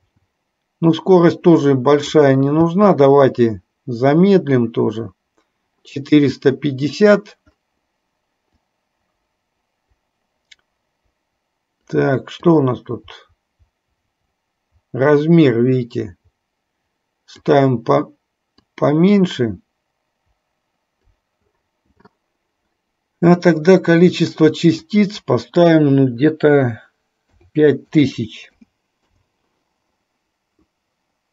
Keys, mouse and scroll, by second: 0.2 space, 1.1-2.3 drag, 8.8-12.2 drag, 12.6-17.7 drag, 18.8-21.3 drag, 25.1-29.6 drag, 28.4 KP_0.